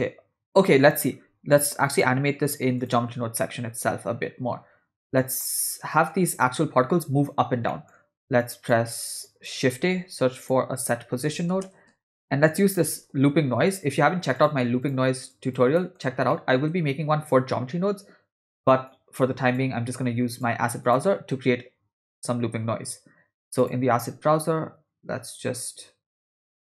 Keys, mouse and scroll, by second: 1.9-3.0 drag, 3.4-5.4 middle drag, 7.7 middle click, 8.4 click, 9.3 click, 9.7 shift+a, 13.0 BackSpace, 15.3 click, 15.8 middle click, 16.3 middle click, 18.9 click, 20.3 click, 20.8-23.7 drag, 26.1-26.7 drag.